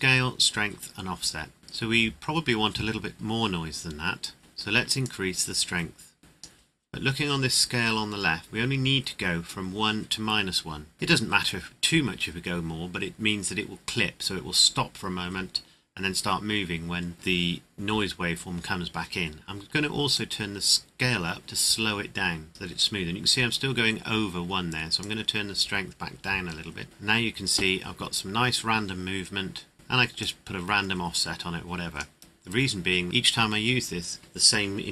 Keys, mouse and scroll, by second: 4.4 KP_Enter, 5.0 click, 7.0 scroll up 1, 20.1 click, 25.0 click, 29.7 scroll down 1, 30.2 click.